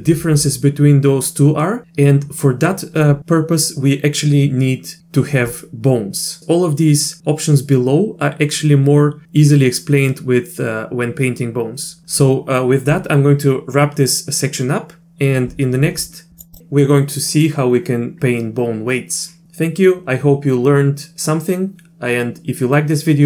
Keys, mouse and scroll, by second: 16.5 click.